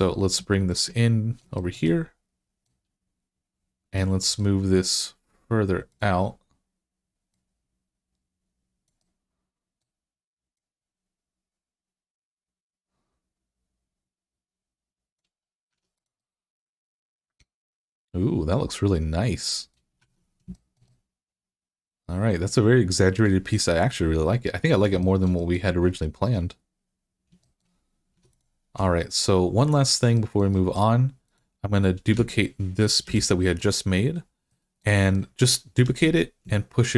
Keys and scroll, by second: 15.5 Tab, 19.8 Tab, 28.0 Tab, 32.0 Tab, 32.9 Tab, 35.7 d.